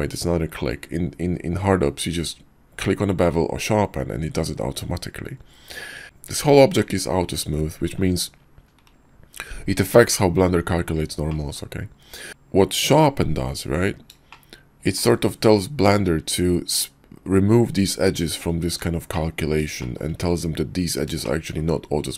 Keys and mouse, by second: 11.3 middle click, 14.3-15.0 shift+middle drag, 19.1 middle click, 19.7-20.0 shift+middle drag, 21.2-21.6 shift+middle drag.